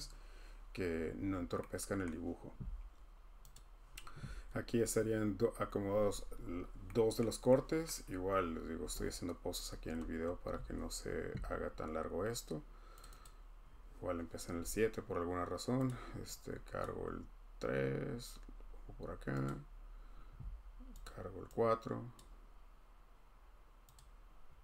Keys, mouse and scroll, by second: 2.0 middle click, 2.5 scroll, 3.5 click, 3.5 scroll down 10, 4.5 middle click, 4.5 middle click, 7.2 middle click, 7.8 scroll, 13.0 click, 13.2 click, 15.9 click, 16.8 click, 19.4 click, 21.0 click, 22.2 click, 23.9 click.